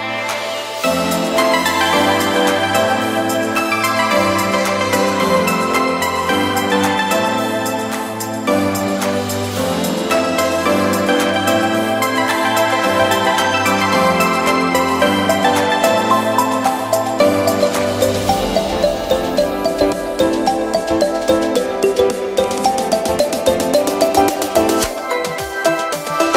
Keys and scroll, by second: 2.2 b, 6.2 e, 10.1 b, 11.3 e, 13.5 b, 14.9 super+z, 16.1 super+z, 17.6 e, 21.8 b, 23.2 super+z, 24.4 e, 25.4 [.